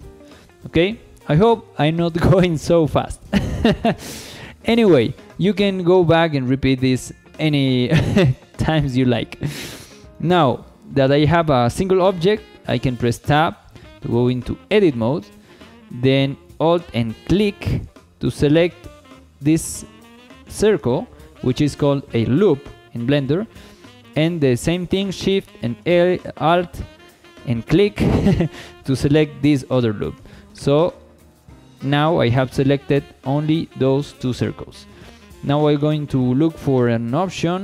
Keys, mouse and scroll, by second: 0.3 shift+middle click, 0.8 middle click, 3.8 scroll up 1, 4.0 shift+middle click, 4.3-4.8 middle drag, 5.0-5.3 shift+middle drag, 7.9 shift+middle drag, 8.5 middle click, 9.0 shift+middle drag, 9.5 scroll up 1, 9.9 shift+middle drag, 13.3 Tab, 14.0 shift+middle click, 17.2 alt+click, 27.9 alt+shift+click, 29.8 scroll down 2, 30.2-31.3 shift+middle drag.